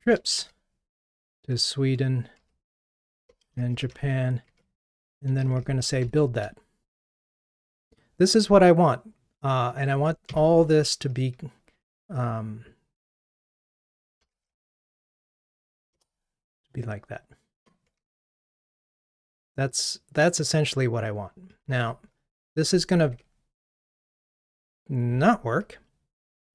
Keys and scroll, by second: 18.7 super+/.